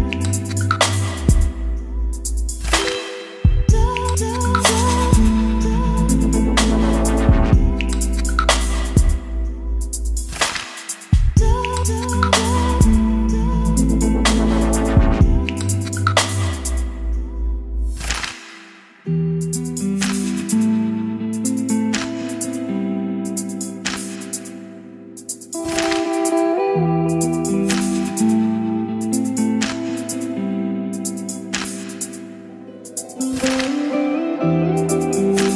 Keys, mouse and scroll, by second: 0.0-11.3 drag, 11.5 ctrl+z, 13.0-20.1 drag, 20.3 ctrl+z, 22.9 click.